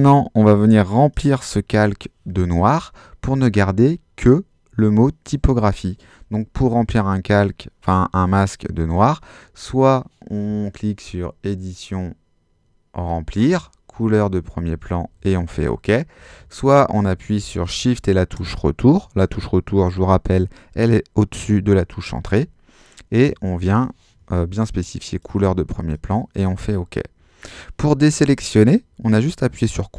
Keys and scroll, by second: 16.3 super+z, 22.2 shift+BackSpace.